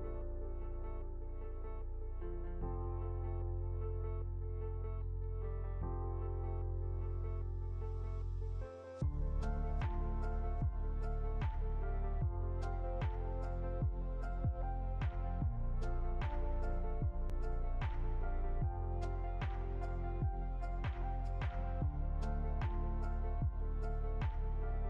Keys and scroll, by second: 7.8 ctrl+c, 8.0 ctrl+f, 15.2 Right, 15.6 Down, 15.8 Right, 16.4 Down, 17.5 Right, 18.5 Up, 23.4 ctrl++.